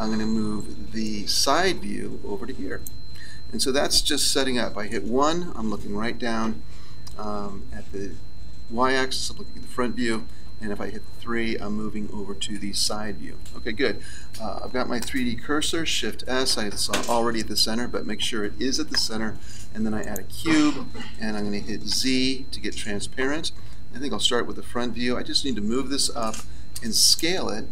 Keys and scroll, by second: 4.8 KP_1, 9.8 KP_3, 15.7 shift+s, 21.9 z, 24.1 KP_1.